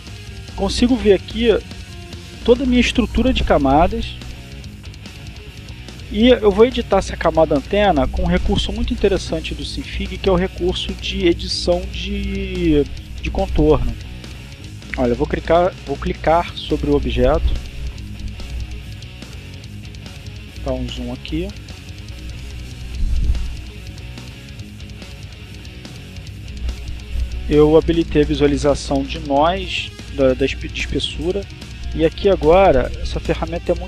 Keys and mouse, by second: 14.0 click, 15.1 click, 16.9 click, 18.6 click, 19.4 click, 20.5 click, 21.7 click, 23.0 click, 24.9-26.4 drag, 26.6 click, 29.7-31.1 drag, 31.9-33.2 drag.